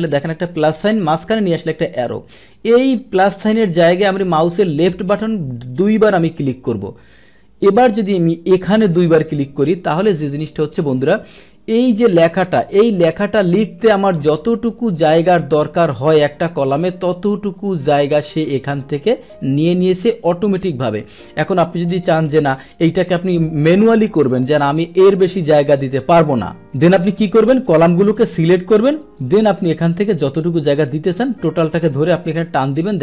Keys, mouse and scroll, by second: 5.7 click, 6.0 click, 6.7 click, 8.9 click, 9.2 click, 10.4 click, 11.8 click, 12.6 click, 13.4 click, 13.8 Right, 17.1 click, 21.1 click, 22.4 click, 24.7-25.8 drag, 26.8 ctrl+z, 27.0 ctrl+z, 27.7 click, 29.1 click, 30.0-31.8 drag, 32.5 click.